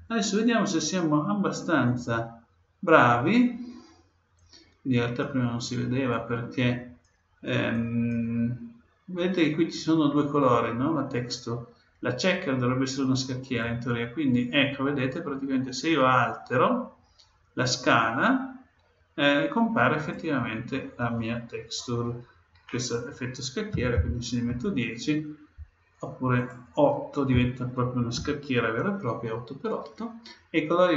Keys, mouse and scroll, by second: 0.0 ctrl+Down, 3.3-4.3 middle drag, 4.3-9.5 drag, 8.7-10.8 middle drag, 13.6-15.5 drag, 20.0-21.9 drag, 26.3-28.3 drag.